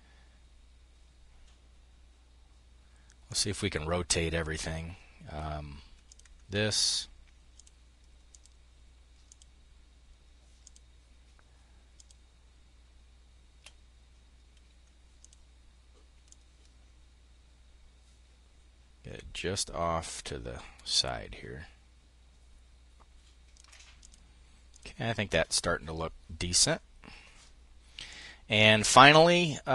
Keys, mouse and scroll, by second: 2.7 click, 5.5 click, 7.0-13.2 shift+drag, 14.6 click, 15.7-23.8 ctrl+drag, 24.2 click, 27.5 click.